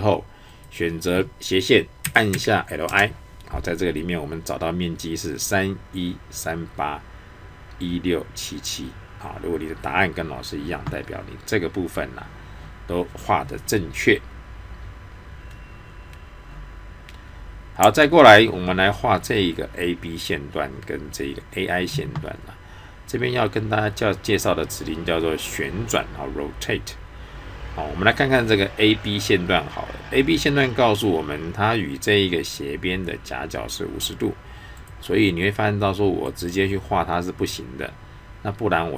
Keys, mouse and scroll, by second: 2.0-2.3 typing, 2.9 Return, 34.8 click.